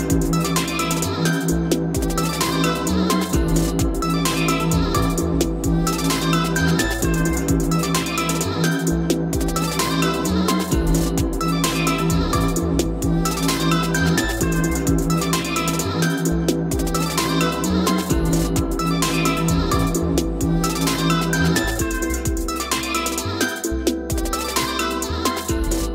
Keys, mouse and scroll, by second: 0.4 click, 5.1 click, 7.1 click, 7.3 click, 8.6-9.3 right drag, 9.5 click, 10.3 right click, 11.5-12.5 drag, 12.2 p, 13.7-20.0 drag.